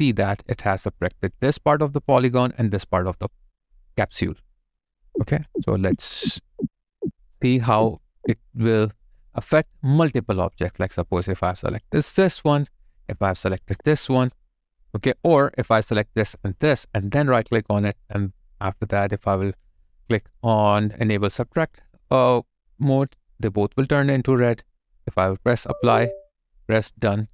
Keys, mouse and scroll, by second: 4.9 ctrl+z, 9.2 alt+click, 10.6 alt+middle click, 13.6 shift+click, 16.1 shift+click, 17.0 right click.